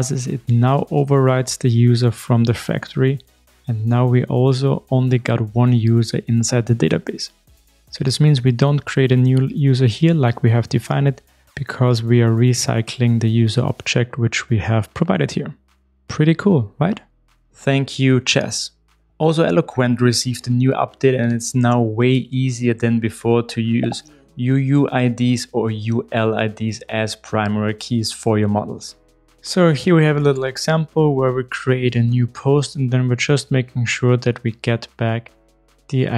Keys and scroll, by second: 0.6 Return, 2.7 ctrl+shift+r, 6.9 shift+super+F12, 9.1 super+e, 13.3 super+e.